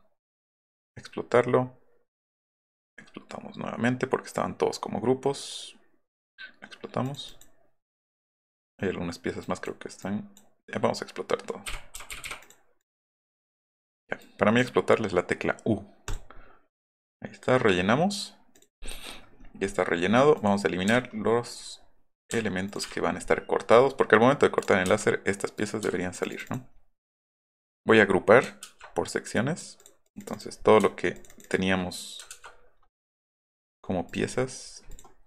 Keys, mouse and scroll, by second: 2.7 click, 6.2 click, 7.0 click, 7.3 drag, 7.9 click, 8.5 click, 9.4 click, 10.0 click, 11.9 i, 12.4 click, 12.8 click, 13.3 click, 13.6 click, 14.2 click, 16.1 click, 18.5 click, 18.8 middle click, 19.4 middle click, 20.3 click, 20.8 Delete, 21.0 middle click, 21.0 scroll, 21.7 middle click, 21.7 scroll, 22.2 click, 22.3 Delete, 22.7 click, 22.9 middle drag, 24.5 click, 24.8 Delete, 25.5 click, 25.8 Delete, 26.1 click, 26.3 middle click, 26.7 middle click, 27.9 middle click, 29.3 drag, 29.8 click, 30.0 click, 30.2 click, 30.8 shift+middle click, 31.2 shift+click, 31.3 shift+click, 32.3 ctrl+g, 33.0 click, 33.2 click, 33.3 click, 34.1 click, 34.9 click.